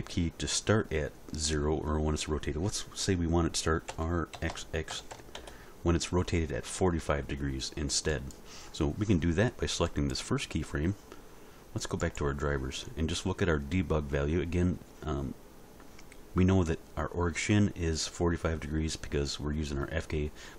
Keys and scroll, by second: 3.9 r, 4.3 x, 4.9 4, 5.1 5, 5.3 Return.